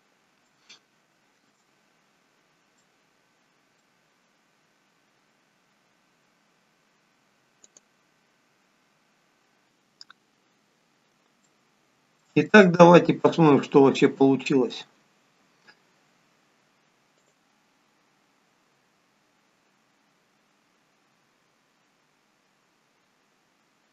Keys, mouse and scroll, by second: 0.7 shift+middle click, 2.8 middle click, 7.9 click, 9.6 middle click, 9.6 scroll down 2, 10.1 scroll up 3, 11.4 shift+middle click, 12.5 middle click, 14.0 shift+middle click, 17.1 click.